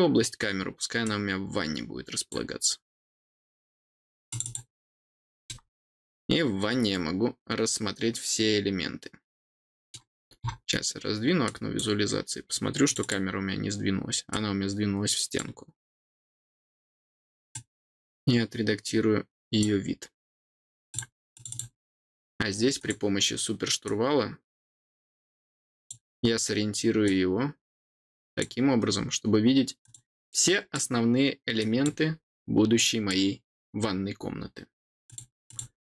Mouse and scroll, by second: 1.0-2.2 drag, 4.2 click, 5.4-9.9 middle drag, 10.1-11.4 scroll down 4, 11.4 click, 12.8 click, 14.2-15.3 drag, 17.5-19.6 drag, 20.9 click, 21.3 click, 22.7 click, 23.8-25.8 drag, 27.0-28.3 drag, 29.8 click, 30.4 click, 31.5 click, 32.7 click, 35.0 click, 35.4 click.